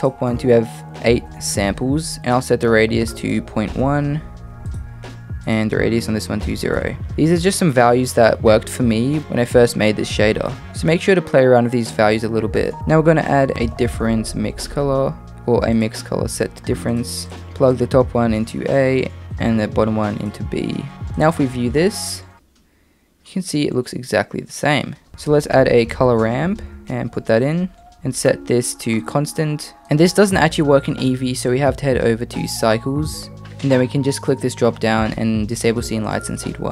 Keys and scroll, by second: 12.8-13.8 typing, 25.1 Escape, 25.1 shift+a, 25.2 shift+a.